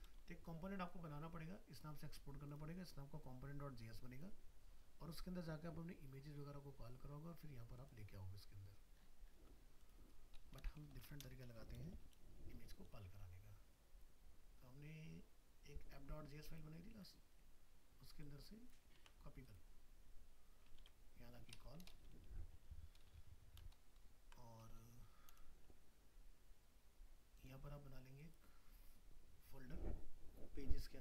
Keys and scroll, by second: 19.0 ctrl+c, 20.8 ctrl+v, 23.8 ctrl+shift+Left.